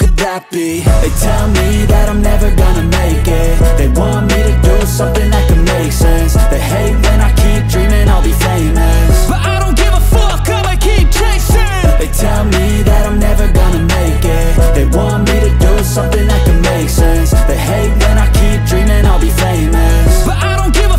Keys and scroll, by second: 0.5 s, 5.5-8.3 typing, 6.2 Return, 7.6 Return, 8.4 Return, 11.2 c, 11.4 t, 11.7 shift+0, 11.8 Return, 15.5 4, 15.6 Return, 16.6 g, 16.7 y, 18.4 shift+d, 18.7 y.